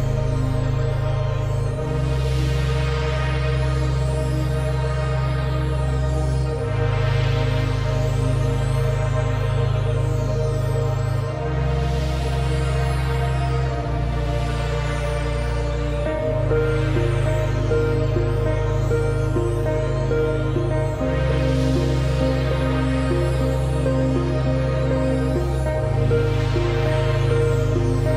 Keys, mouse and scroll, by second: 2.3 ctrl+shift+[, 4.9 click, 14.1 scroll up 1, 15.9-16.4 alt+scroll down 1, 16.9 click, 21.4-22.0 alt+scroll up 2, 22.0 space, 22.2 click, 22.3 space, 23.4 click.